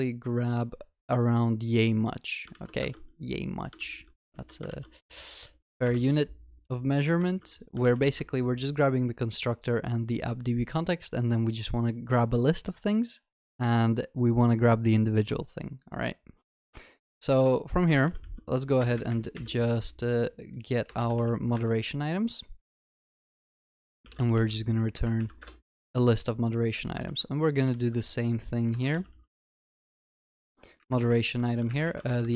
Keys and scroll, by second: 2.8 ctrl+c, 3.0 ctrl+Tab, 3.8 ctrl+v, 4.4 ctrl+alt+shift+l, 4.8 ctrl+s, 5.6 alt+Return, 7.3 ctrl+c, 7.8 ctrl+v, 10.4 ctrl+s, 21.6 Return, 27.0 ctrl+c, 27.7 ctrl+v, 30.2 Return.